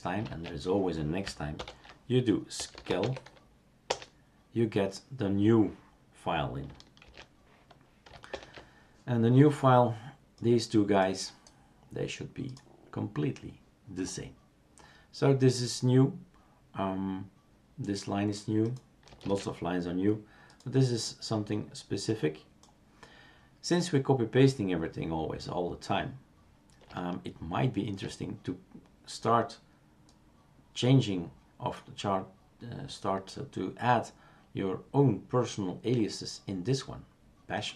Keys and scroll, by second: 0.3 shift+super+q, 2.3-3.5 typing, 3.9 Return, 7.0 shift+super+q, 8.3 shift+super+Return, 19.3 shift+super+q.